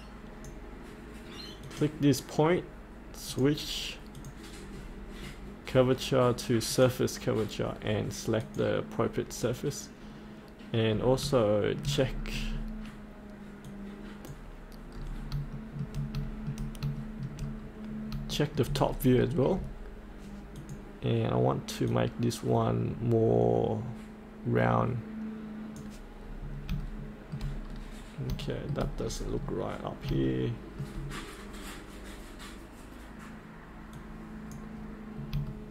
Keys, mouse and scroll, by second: 3.3 click, 4.7-6.7 scroll down 1, 6.7 click, 10.9-11.2 scroll up 1, 12.0-13.6 scroll down 1, 13.6 click, 14.9-15.3 scroll up 1, 15.5 shift+middle click, 16.2 shift+middle click, 17.0 shift+middle click, 17.6-18.1 scroll down 1, 18.3 shift+middle click, 18.8-20.6 scroll down 1, 20.6-26.2 drag, 26.2-26.7 scroll up 1, 26.8 shift+middle click, 27.6-28.3 scroll down 1, 28.5 shift+middle click, 29.0-29.5 scroll up 1, 29.5 middle click, 30.2 shift+middle click, 33.9-35.0 drag, 35.2 scroll up 1, 35.5 shift+middle click.